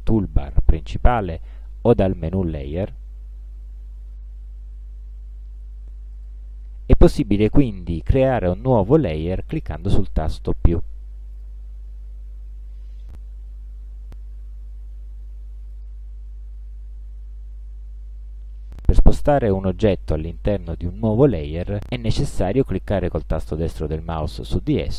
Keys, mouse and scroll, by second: 2.3 click, 6.2 click, 11.4 click, 15.7 click, 19.5-20.8 drag, 23.8 right click.